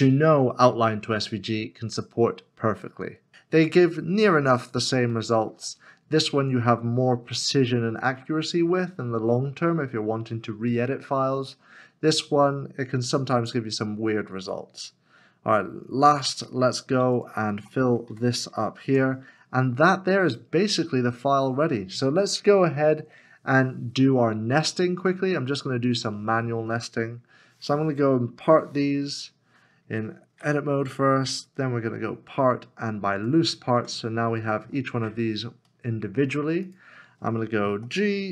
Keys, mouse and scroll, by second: 1.0-1.8 scroll down 1, 3.3 Tab, 5.1 shift+middle click, 15.0 shift+middle click, 15.2 scroll down 1, 17.2 alt+click, 18.1 f, 18.9 Tab, 20.1 scroll down 1, 21.1 scroll up 1, 28.4 p, 30.4 Tab, 31.8 Tab, 34.7 scroll down 1, 35.7 shift+middle click, 37.8 g.